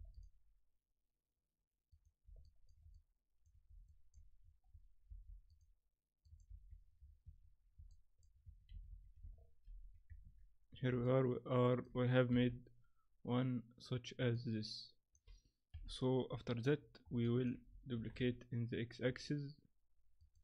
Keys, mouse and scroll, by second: 2.4 shift+middle click, 2.9 middle click, 3.9 shift+middle click, 4.4-4.7 scroll up 3, 5.1 ctrl+r, 6.5 ctrl+2, 7.2 Tab, 7.2 scroll down 6, 7.9 middle click, 8.4 Tab, 8.7 a, 8.9 a, 9.6 ctrl+n, 10.2 Tab, 10.7-11.0 scroll down 3, 11.0 middle click, 12.3 KP_7, 14.3 middle click, 15.7 KP_7, 16.8-17.2 scroll down 2, 17.2 shift+middle click, 18.0 shift+d.